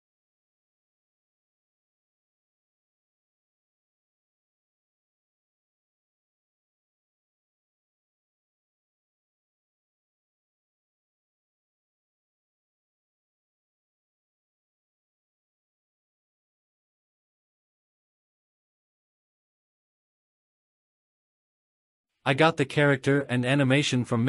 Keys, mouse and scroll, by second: 0.0-0.2 typing, 0.5 click, 0.7 Tab, 0.7 ctrl+s, 3.9 click, 4.4-5.5 drag, 5.5-6.1 scroll down 3, 6.4 KP_0, 7.3 scroll down 2, 10.2-11.7 scroll down 4, 10.7 click, 11.7-13.0 drag, 13.4-14.1 scroll up 4, 14.4-15.2 drag, 15.7-16.4 drag, 16.9-18.0 drag, 19.6-20.7 drag, 22.3 click, 22.6-23.1 scroll down 1, 23.1-23.8 drag.